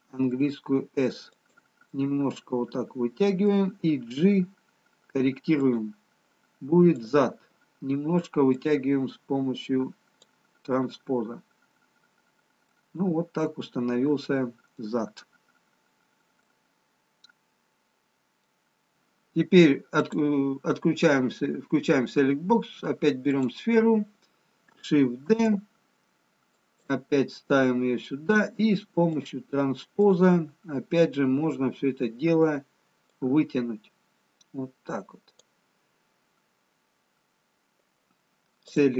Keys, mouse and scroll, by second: 0.8 s, 2.1 middle click, 4.4 g, 7.4 click, 8.5 click, 11.0-12.2 scroll up 1, 12.2-13.6 scroll up 6, 13.6 middle click, 15.2-16.3 scroll down 2, 16.3 middle click, 16.3-18.9 scroll down 2, 20.1 click, 25.3 shift+d, 29.2 click, 32.7 click, 33.5 click, 38.7 click.